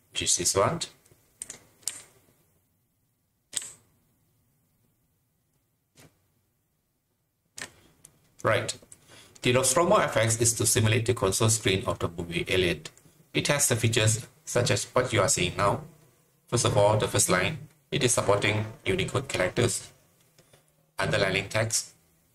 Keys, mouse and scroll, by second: 1.4 click, 1.8-7.4 typing, 2.3-5.0 drag, 12.7 typing.